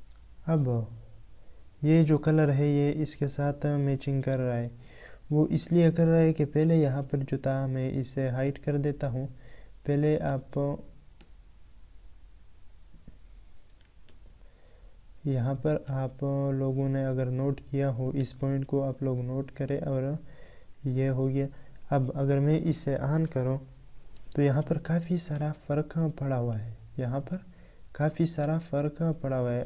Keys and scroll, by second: 13.8 ctrl+z, 14.5 ctrl+z, 18.1 ctrl+z.